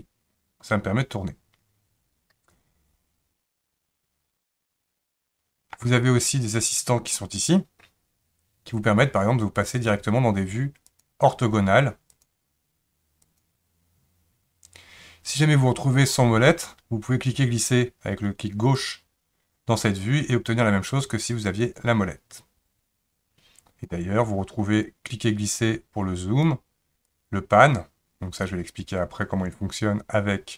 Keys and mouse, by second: 11.0 click, 12.2 click, 13.3 click, 18.9 click, 20.4-23.9 drag, 24.9-26.5 drag, 27.2-30.5 drag.